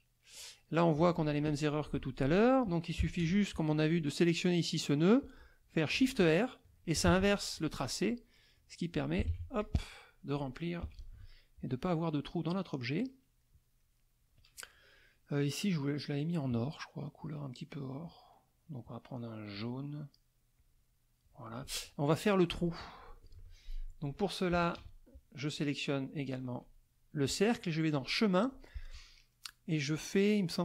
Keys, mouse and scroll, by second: 0.0 middle click, 1.0 z, 1.1 click, 1.8 F2, 3.0 KP_Subtract, 3.2 KP_Add, 4.7 click, 7.1 shift+r, 8.9 shift+click, 9.3 shift+r, 9.6 shift+click, 10.8 KP_Subtract, 11.9-13.3 middle drag, 13.4 middle click, 15.7 click, 17.8 middle click, 19.5 click, 20.6 click, 21.4 middle click, 22.5 z, 22.6 click, 23.3 F2, 24.5 KP_Subtract, 24.7 KP_Add, 26.2 shift+click, 28.0 click.